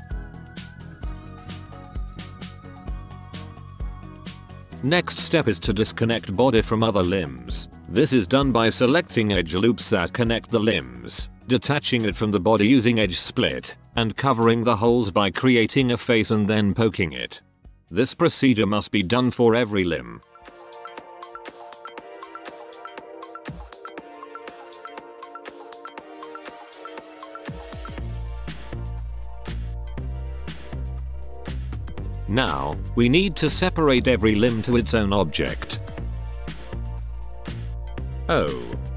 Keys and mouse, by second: 0.0-1.3 middle drag, 0.2 right click, 0.3-2.5 typing, 1.4 ctrl+KP_1, 2.0 middle click, 2.3 middle click, 3.0 middle click, 3.6-4.2 typing, 3.7 ctrl+KP_1, 3.8 ctrl+KP_1, 4.2 Tab, 4.6 ctrl+KP_1, 6.9 Home, 8.1 a, 8.2-10.4 middle drag, 10.4 middle click, 10.6 right click, 10.7 z, 10.8 z, 11.4 right click, 11.6 middle click, 12.2-14.5 typing, 12.5 right click, 12.8 middle click, 13.3 ctrl+z, 13.7 right click, 14.5 ctrl+z, 15.0 click, 15.0-16.1 middle drag, 15.5 click, 15.7-23.2 typing, 15.9 right click, 16.0 ctrl+KP_1, 16.2 middle click, 16.9 click, 17.4 right click, 18.5 ctrl+KP_1, 19.3 Tab, 19.5 Tab, 19.6 middle click, 19.6 right click, 20.0 middle click, 20.2 right click, 20.6 right click, 20.7 middle click, 20.8 alt+p, 20.9 middle click, 21.0 middle click, 21.4 right click, 21.6 ctrl+z, 21.7 middle click, 22.5 ctrl+p, 23.2 right click, 23.3 alt+p, 23.5 right click, 23.7 ctrl+z, 23.8 alt+p, 23.9 ctrl+z, 24.0 right click, 24.1 alt+p, 24.2 ctrl+z, 24.3-30.4 typing, 24.3 alt+p, 24.4 Tab, 24.6 click, 24.8 middle click, 25.0 Tab, 25.1 right click, 25.2 ctrl+KP_1, 25.4 right click, 26.1 ctrl+z, 26.8 alt+p, 27.0 Tab, 27.2 Tab, 27.2 right click, 27.6 right click, 27.8 alt+p, 27.8 middle click, 28.0 right click, 28.1 alt+p, 28.3 alt+p, 28.3 middle click, 28.5 click, 28.6 middle click, 29.0 Tab, 29.3 right click, 29.9 middle click, 30.0 Tab, 30.5 ctrl+KP_1, 30.8 Tab, 31.1 ctrl+s, 33.2 Tab, 33.2-35.8 right drag, 34.0 a, 34.5 l, 34.7 p, 35.8 Tab, 36.3-37.9 right drag, 36.6 l, 36.8 p, 37.9 l, 38.0 p.